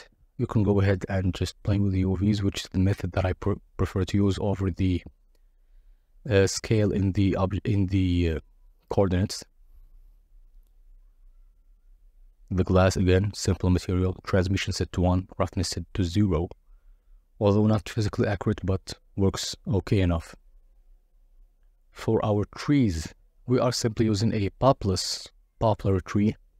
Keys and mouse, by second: 0.4 click, 0.9-1.5 drag, 1.7 a, 2.7 s, 3.7 click, 4.2 click, 4.7 click, 5.2 click, 6.0 click, 7.4 click, 7.7 Tab, 8.3 click, 9.4 click, 10.6 click, 11.7 middle click, 14.9 click, 16.2 z, 19.3 click, 21.8 click, 24.6 drag.